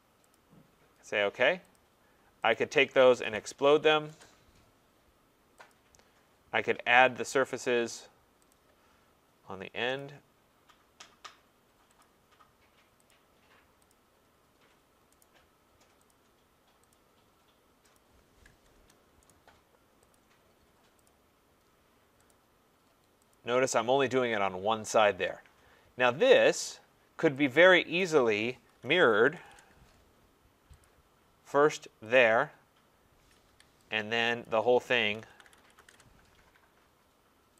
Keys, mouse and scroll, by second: 0.3 click, 1.7 click, 2.5 click, 2.9-4.2 typing, 5.7 click, 6.1-6.9 scroll, 8.5 click, 10.0 click, 12.0 click, 13.1 click, 13.9 click, 14.3-14.9 scroll, 15.2 right click, 16.1 click, 17.0 click, 18.0 click, 18.1-18.7 scroll down 3, 18.7 Return, 19.3 right click, 20.1 click, 21.0 click, 22.3 click, 23.3 click, 23.9 scroll, 26.3 right click, 26.8-27.3 scroll, 28.0 click, 28.5-29.8 typing, 30.8 click, 32.2 click, 33.4 Escape, 34.4 click, 34.4-36.5 typing.